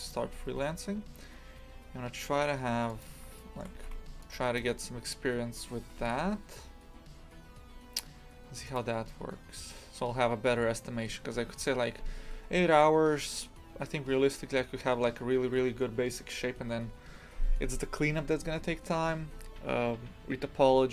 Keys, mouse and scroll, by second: 0.2 s, 3.3 shift+middle click, 3.7 a, 4.5 shift+click, 5.7 e, 11.4 scroll down 5, 12.4-13.1 scroll down 1, 13.1 scroll down 2.